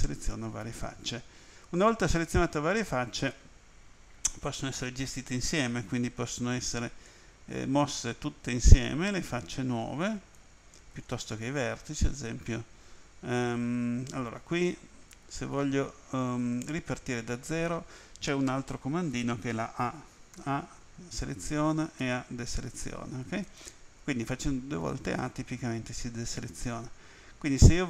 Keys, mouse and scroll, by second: 7.1 click, 11.0 ctrl+z, 12.1 right click, 12.2 ctrl+z, 20.4 a, 23.1 a, 26.2 right click.